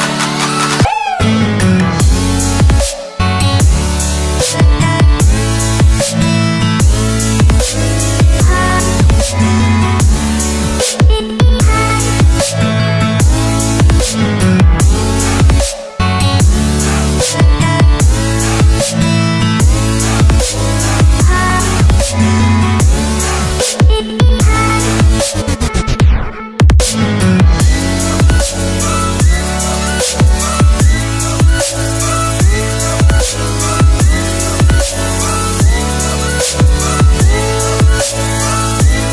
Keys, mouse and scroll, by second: 0.2 ctrl+c, 0.3 alt+Tab, 0.8 click, 1.7 ctrl+v, 2.1 click, 4.9-5.2 scroll down 1, 5.2 click, 6.4 KP_Add, 6.6-8.6 typing, 8.0 Return, 8.3 KP_Add, 10.0 click, 11.9 Tab, 12.4 click, 12.6 ctrl+c, 12.8 alt+Tab, 13.2 ctrl+v, 13.6-15.3 typing, 15.8 click, 16.7 click, 17.0 ctrl+c, 17.2 alt+Tab, 17.7 ctrl+v, 18.4 click, 21.7 scroll down 1, 22.2 click, 22.9 alt+Tab, 23.6 click, 23.9 ctrl+c, 24.5 ctrl+v, 25.0 click, 25.2 Return, 25.5 click, 25.6 Return, 26.1 click, 26.5 ctrl+0, 26.8 click, 30.8 click, 31.1 right click, 33.7 click.